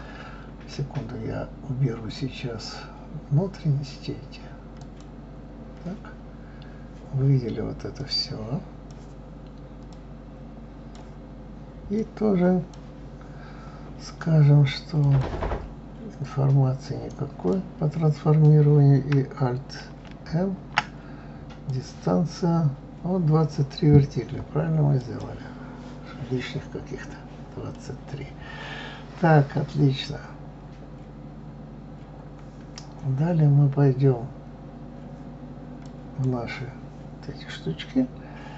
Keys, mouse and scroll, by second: 4.7 click, 6.5 scroll down 2, 8.0 click, 9.9-12.1 drag, 15.0 click, 17.1 click, 20.1 alt+m, 25.0 click, 27.8-30.8 middle drag, 30.8-31.4 scroll up 2, 31.4 scroll up 1, 35.8 click.